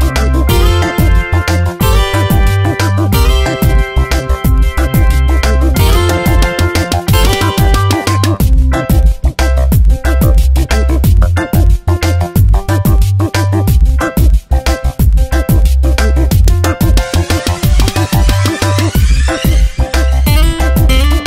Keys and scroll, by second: 1.3 ctrl+d, 2.2 s, 5.3 space, 5.6 v, 16.6 space, 17.3 Tab, 20.6 F9.